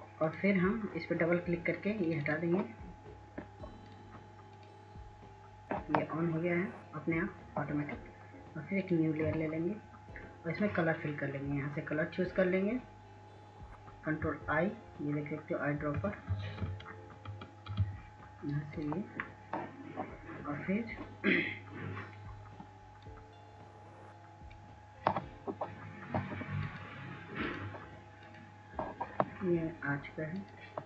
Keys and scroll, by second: 5.6 ctrl+alt+z, 20.4 i, 22.8 ctrl+s, 23.1 ctrl+s, 23.3 ctrl+s.